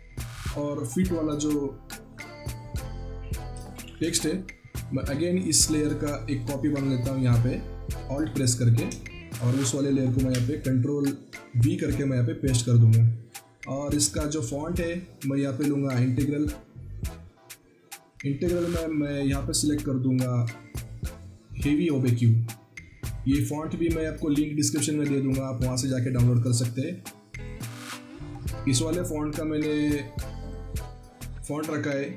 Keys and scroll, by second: 0.3 alt+Tab, 3.7 ctrl+c, 4.0 alt+Tab, 9.0 ctrl+a, 10.1 ctrl+v.